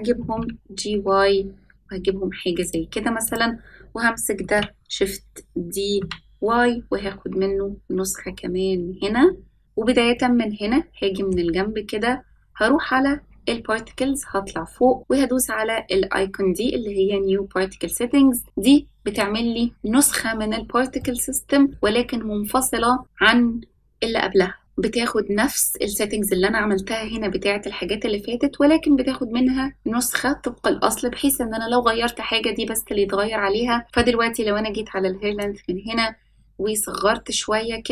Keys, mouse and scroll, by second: 0.1 g, 3.2 click, 4.4 shift+d, 10.1-11.3 middle drag, 13.5-14.3 scroll up 5, 15.0-18.5 scroll up 1, 19.1-21.0 drag, 21.0-21.7 middle drag, 35.3-37.9 drag.